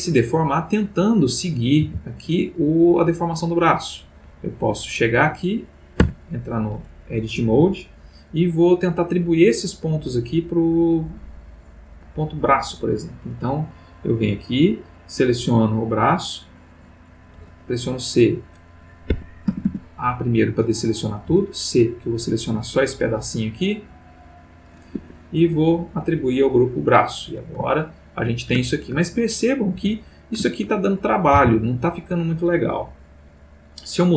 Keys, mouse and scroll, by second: 0.7 click, 1.4 click, 1.8 r, 3.7 click, 4.5 click, 6.0 Tab, 13.9 middle click, 14.7 middle click, 15.7 click, 17.4 c, 19.1 Escape, 19.5 a, 21.2 c, 21.6-24.8 drag, 24.9 Escape, 26.4 click, 27.9 ctrl+middle click, 28.6-29.1 ctrl+middle drag, 29.7 Tab, 30.9 ctrl+click, 31.4 ctrl+r, 31.9 Escape.